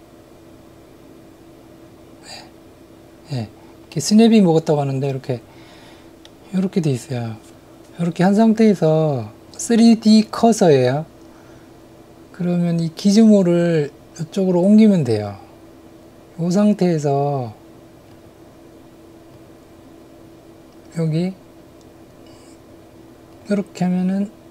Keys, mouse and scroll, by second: 6.2 middle click, 18.2-23.4 drag.